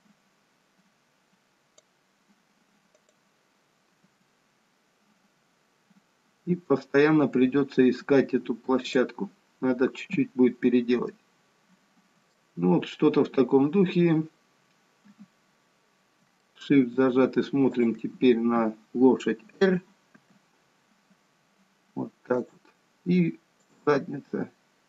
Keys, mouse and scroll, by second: 3.1 click, 4.2 g, 9.7-10.9 scroll down 2, 11.3 middle click, 13.0-14.2 scroll up 1, 15.2 KP_3, 16.6 shift+middle click, 17.9 click, 20.4 r, 23.8 click, 24.3 r.